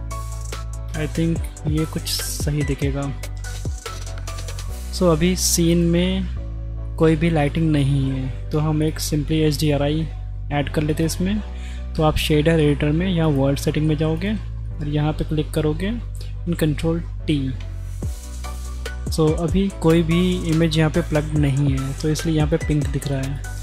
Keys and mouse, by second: 2.2 z, 4.2 click, 5.7 click, 6.9 click, 8.5 click, 8.8 click, 11.0-12.2 drag, 12.6-13.5 drag, 14.0 click, 14.7 click, 16.4 ctrl+r, 17.6 ctrl+t, 18.2 click, 18.6 click, 20.3 click, 23.1 click.